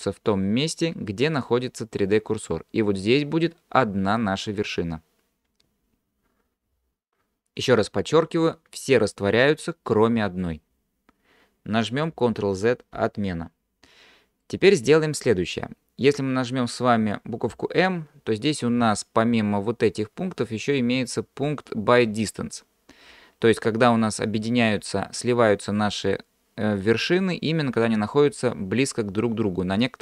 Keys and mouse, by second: 13.0 ctrl+z, 14.4 middle click, 17.5 m.